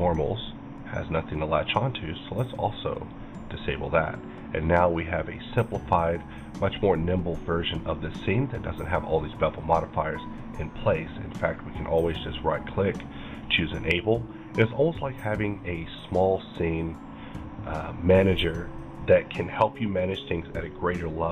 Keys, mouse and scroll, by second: 3.0 click, 3.8-13.3 middle drag, 11.5 right click, 13.3 click, 14.0-17.3 middle drag.